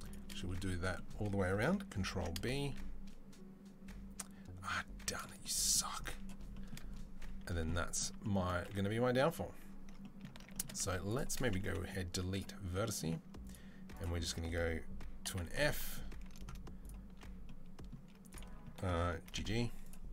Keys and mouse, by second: 1.9 ctrl+b, 7.4 a, 8.9 1, 10.9 click, 11.5 Delete, 11.5-13.3 middle drag, 13.3 alt+click, 13.3 alt+middle click, 13.8 alt+click, 13.8-20.1 alt+middle drag, 15.1 f, 19.1 g.